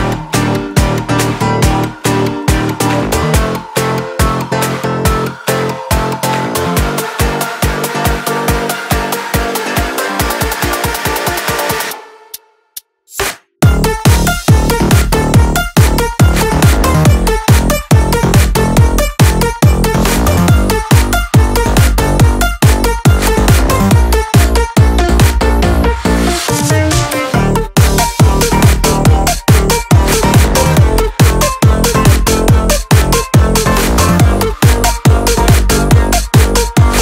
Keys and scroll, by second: 5.0 ctrl+g.